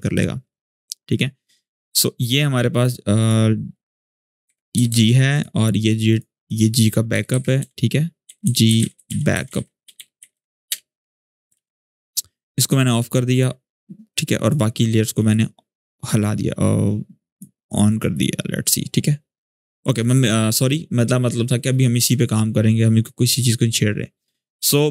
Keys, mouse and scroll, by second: 0.8 click, 3.9 Return, 4.2 Right, 5.1 click, 6.9 Return, 7.1 Right, 7.8-10.6 typing, 11.3 ctrl+s, 12.5 click, 14.8-17.1 scroll down 1, 17.1-19.7 drag, 22.8-24.9 drag.